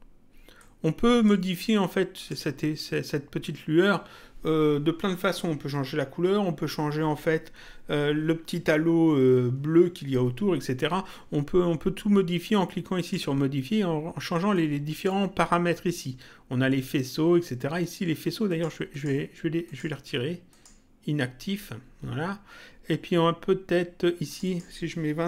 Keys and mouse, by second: 0.6 click, 2.2 click, 13.0 click, 14.5 click, 18.5 click, 24.2 click.